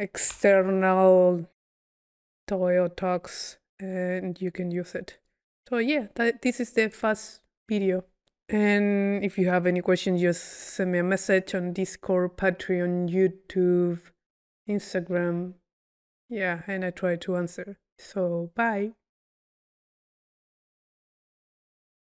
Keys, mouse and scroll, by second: 0.4 Delete, 5.2 click, 5.7 click, 6.6-7.1 drag, 7.8-8.6 drag.